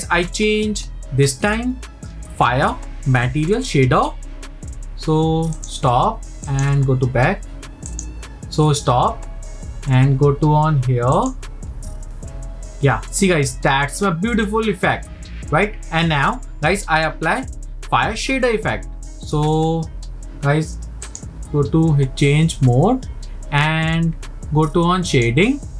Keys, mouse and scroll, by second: 7.2-10.9 drag, 11.2 click, 21.2 click.